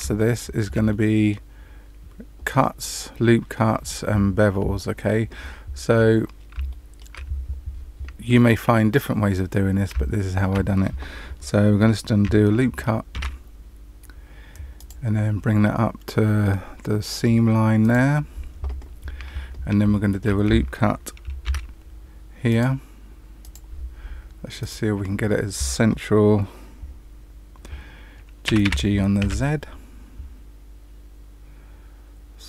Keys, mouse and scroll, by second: 0.1 shift+middle click, 0.8 middle click, 6.1-6.5 scroll up 1, 6.6 shift+middle click, 9.4 scroll up 1, 10.0 shift+middle click, 13.1 ctrl+r, 19.9 shift+middle click, 21.4 ctrl+r, 24.5 click, 28.4 g.